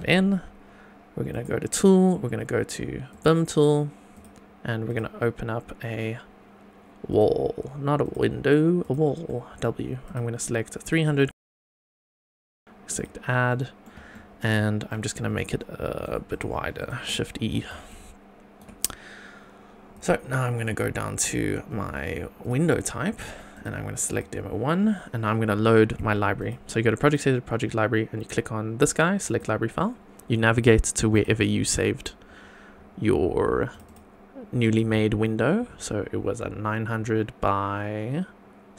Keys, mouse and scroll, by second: 1.3 click, 3.1 click, 4.1-7.3 drag, 8.0-9.1 drag, 9.3-9.6 middle drag, 10.0-11.0 drag, 11.2 scroll up 2, 11.6-12.1 shift+middle drag, 12.9 click, 13.5-13.8 middle drag, 14.1 shift+middle click, 14.6 scroll down 2, 14.8 middle click, 15.3 shift+right click, 16.3 click, 16.8 click, 17.5 shift+e, 17.9 shift+right click, 19.9-22.5 drag, 23.5-24.1 drag, 26.4 click, 27.0 click, 29.2 click.